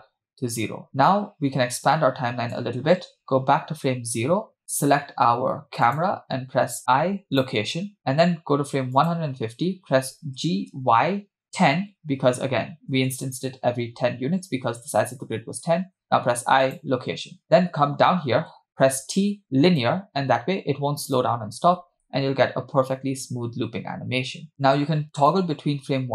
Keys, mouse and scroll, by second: 1.9 click, 3.8 Left, 5.8 click, 6.9 i, 9.1 click, 10.5 g, 16.1 i, 18.9 t, 21.2 click, 21.8 space, 24.5 click, 24.5 space, 25.4 click.